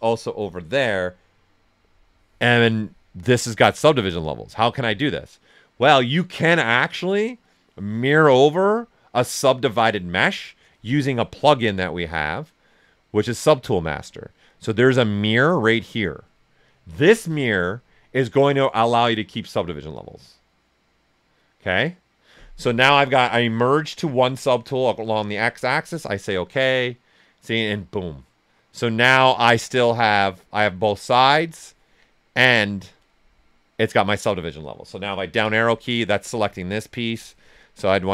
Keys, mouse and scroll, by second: 2.7-11.1 drag, 16.7 click, 25.3 click, 25.3 typing, 29.8-31.2 drag, 31.2-34.4 drag, 35.3 Down, 37.0 click.